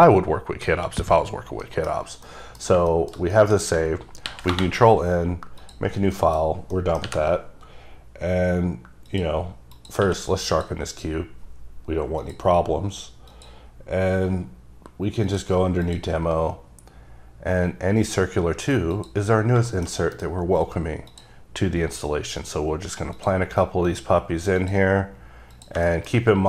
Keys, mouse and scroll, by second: 0.7 click, 1.5 scroll down 1, 1.8 middle click, 2.0-2.4 scroll down 3, 2.4 middle click, 2.9 shift+middle click, 4.4 n, 5.7 click, 6.3 middle click, 6.9 middle click, 7.2 n, 9.2 click, 9.9 click, 10.2 q, 10.6 click, 12.3 click, 15.4 click, 16.0 click, 19.4 click, 19.5 scroll up 3, 19.7 scroll down 1, 19.8 middle click, 20.1 double middle click, 20.3 scroll down 1, 21.2 click, 21.8-22.5 scroll down 2, 22.5 click, 23.3 click, 24.4 click, 24.7 click, 25.7 click, 26.0 shift+middle click.